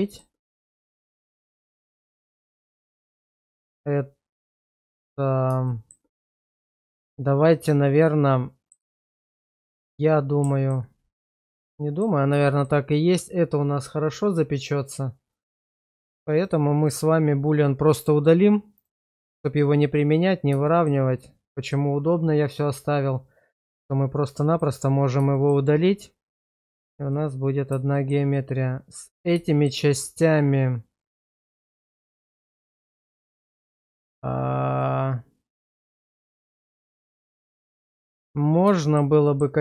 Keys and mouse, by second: 0.0 shift+middle click, 0.7 middle click, 1.4 shift+middle drag, 3.0 click, 3.5 click, 5.7 shift+middle drag, 6.2-8.7 middle drag, 8.9 shift+middle drag, 9.9-10.7 middle drag, 11.6-12.0 middle drag, 12.5 shift+middle drag, 14.8 click, 15.4 click, 15.9 click, 16.4 click, 16.8 click, 17.4 click, 18.0 click, 18.8 click, 20.7 shift+middle click, 21.1-21.7 middle drag, 24.5 click, 25.3 shift+middle click, 26.7 shift+middle drag, 27.1-27.7 middle drag, 27.9 shift+middle drag, 28.3 middle click, 29.5 shift+middle drag, 29.9-33.9 middle drag, 34.8-38.2 middle drag, 38.8 shift+middle drag, 39.2 middle click.